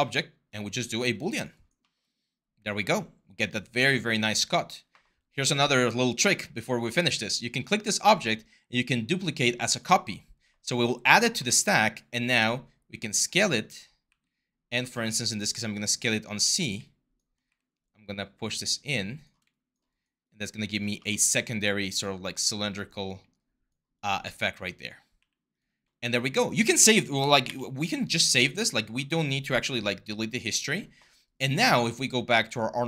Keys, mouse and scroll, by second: 11.2 w, 12.0 r, 13.9 w, 14.6 r, 17.3 w, 25.0 q, 27.3 ctrl+s.